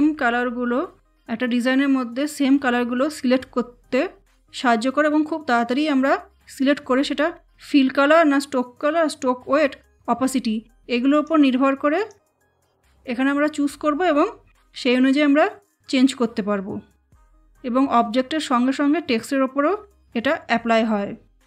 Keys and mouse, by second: 11.0 click.